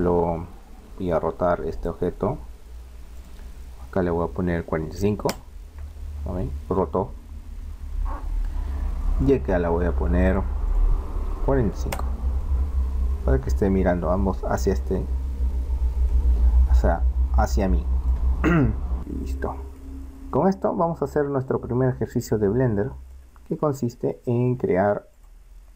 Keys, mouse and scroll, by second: 1.7-3.7 right drag, 3.2-4.9 drag, 6.7-9.2 middle drag, 9.3-11.1 right drag, 10.7-12.4 drag, 14.6-19.0 middle drag, 19.9-22.5 middle drag, 23.2-25.3 middle drag.